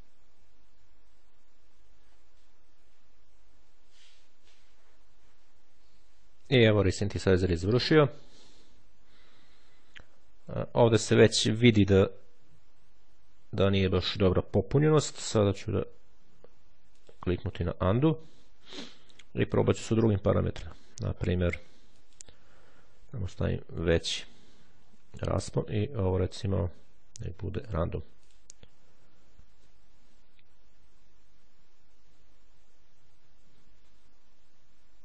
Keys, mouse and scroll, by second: 8.6-9.1 ctrl+scroll up 2, 10.9-11.5 shift+scroll up 2, 14.0-14.6 shift+scroll down 2, 16.9 click, 19.4 click, 20.2 click, 21.8 click, 22.9 2, 23.6 0, 25.5 click, 27.5-28.7 drag.